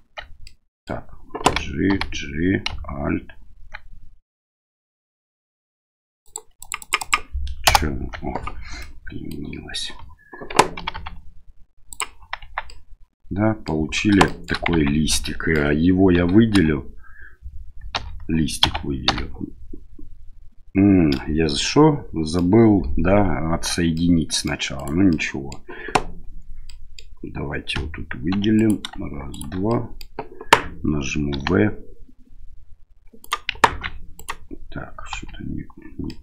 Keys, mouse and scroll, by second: 0.4 middle click, 1.4 g, 8.8 middle click, 10.8 g, 12.4 Tab, 12.7-13.7 middle drag, 14.2 shift+middle drag, 14.7 Tab, 15.1 middle click, 16.1 a, 16.5 a, 17.9 l, 18.6 a, 19.1 l, 21.2-22.5 middle drag, 24.0 middle click, 24.8 right click, 25.1 middle click, 26.7 middle click, 28.5 right click, 28.5 2, 29.3 right click, 29.7 middle click, 31.3 v, 33.7 ctrl+z, 34.2 right click, 35.1 l, 36.1 middle click.